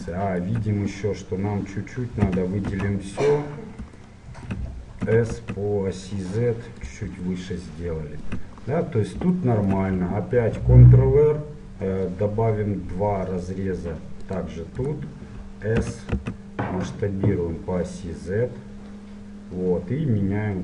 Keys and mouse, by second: 2.3 a, 2.9 a, 3.4 middle click, 5.1 s, 7.5 middle click, 8.5-10.4 middle drag, 10.4 ctrl+r, 15.8 s.